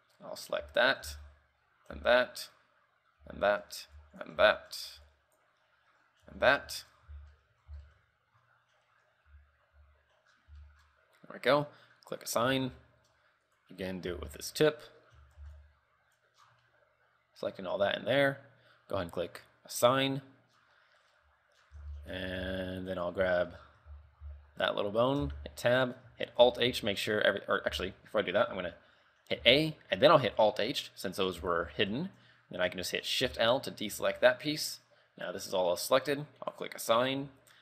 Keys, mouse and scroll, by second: 0.8 l, 1.2 z, 2.1 l, 2.4-2.8 scroll down 3, 3.3 l, 4.1 b, 4.7 shift+middle click, 5.0 b, 6.4 l, 6.9 shift+middle click, 7.2 z, 7.5 middle click, 7.9 z, 8.0 middle click, 9.4 l, 9.9 l, 10.4-10.8 scroll down 4, 10.8 shift+middle click, 12.4 click, 12.8 Tab, 13.0 shift+middle click, 13.9 right click, 14.3 Tab, 14.5 shift+middle click, 14.8-15.3 scroll up 8, 15.3 a, 15.6 b, 16.6 scroll down 4, 16.8 middle click, 19.4 click, 20.2 Tab, 20.7 scroll down 4, 21.0 middle click, 21.4 KP_3, 21.7 scroll down 2, 21.9 z, 22.1 shift+middle click, 22.4-22.9 scroll up 4, 22.6 z, 22.9 scroll down 1, 23.4 right click, 23.5 shift+middle click, 23.7 scroll up 4, 24.0 z, 24.4 z, 25.4 Tab, 25.8 middle click, 26.6 alt+h, 26.9 shift+middle click, 27.3 scroll up 2, 27.9 ctrl+z, 28.1 scroll up 1, 28.2 scroll down 5, 29.5 a, 30.4 alt+h, 30.6-31.1 scroll up 4, 31.1 middle click, 31.5 z, 31.8 shift+middle click, 33.4 shift+l, 34.1 middle click, 36.7 click, 37.1-37.6 scroll down 3.